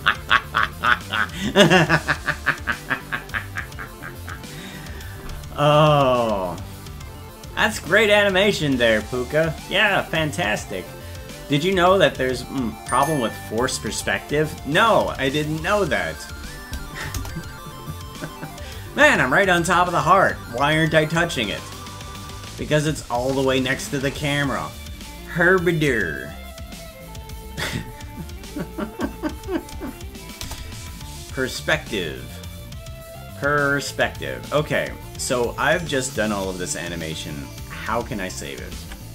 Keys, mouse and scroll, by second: 23.2-24.3 scroll down 5, 30.4 KP_0.